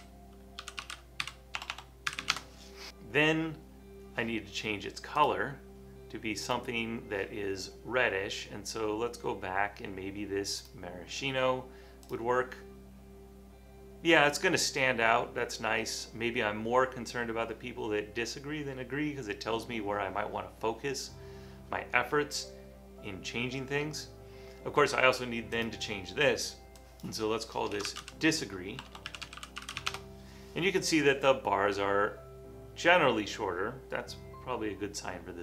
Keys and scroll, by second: 0.0-3.4 typing, 27.6-30.3 typing, 32.5-33.3 typing.